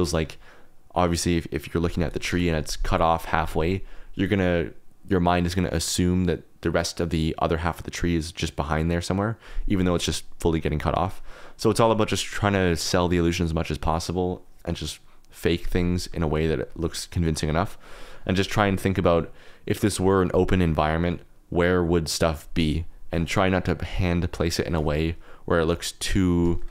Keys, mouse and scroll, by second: 2.2 KP_0, 11.2 click, 16.2 shift+click, 16.6 click, 24.3 click, 24.5 click, 25.6 middle click, 26.0 KP_Decimal, 26.4 middle click.